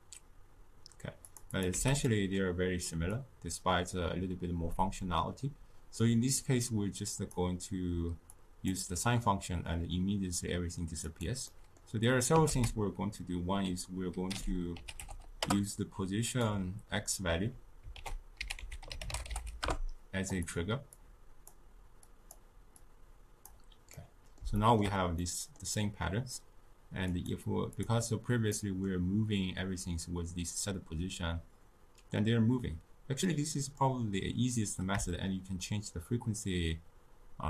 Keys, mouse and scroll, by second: 1.5 click, 1.7 x, 2.0-3.1 middle drag, 3.1 click, 8.3-11.2 drag, 11.4-12.4 middle drag, 12.4 ctrl+a, 17.9 ctrl+a, 20.9 drag, 22.0 click, 22.7-23.9 drag, 23.9-27.0 middle drag, 27.0-28.5 drag, 28.5-31.7 middle drag, 33.9-36.9 drag.